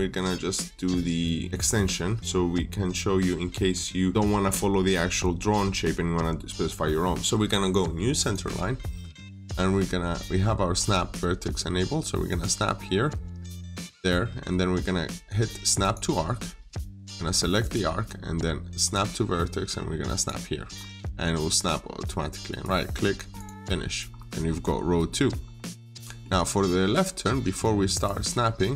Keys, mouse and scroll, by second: 8.0 click, 16.4 click, 20.6-21.4 scroll up 1, 22.4 right click, 23.2 click, 24.0-24.7 scroll up 1, 24.7 scroll down 1, 25.0 middle click, 25.5 scroll down 1, 25.8 middle click.